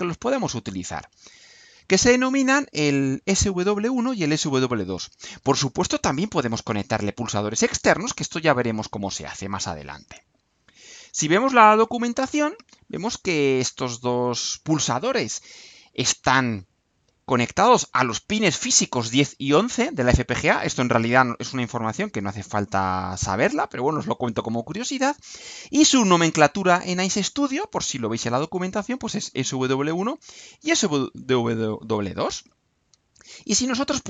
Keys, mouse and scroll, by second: 10.4-11.4 scroll down 2, 31.7-32.5 scroll down 4.